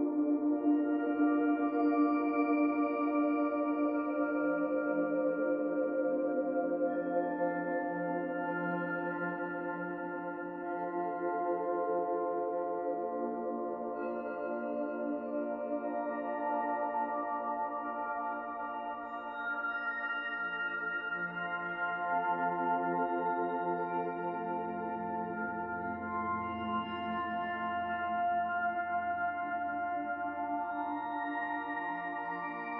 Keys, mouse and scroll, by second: 0.6 middle click, 1.1 middle click, 2.0 click, 2.4 shift+click, 2.8 shift+click, 4.2 ctrl+a, 8.5 click, 10.0 ctrl+a, 11.4 click, 12.0 ctrl+a, 13.1 middle click, 14.0 shift+middle click, 15.6 middle click, 17.4 middle click, 18.0 click, 18.3 middle click, 20.5 e, 22.8 e, 26.2 e, 27.9 e, 28.8 middle click, 29.9 middle click, 31.0 shift+click, 32.5 ctrl+KP_Add.